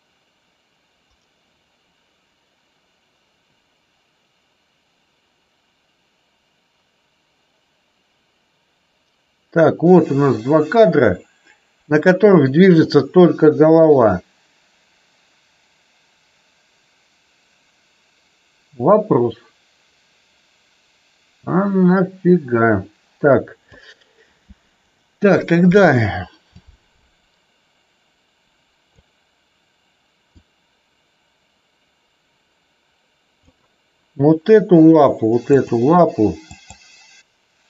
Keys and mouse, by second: 26.6 click, 30.3 click, 35.5 click, 36.5 click.